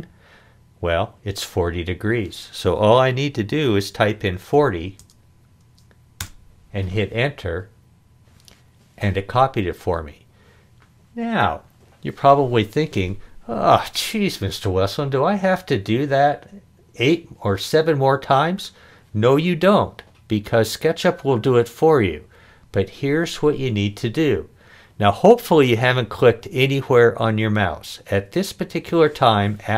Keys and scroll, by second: 4.6 4, 5.0 0, 6.2 Return.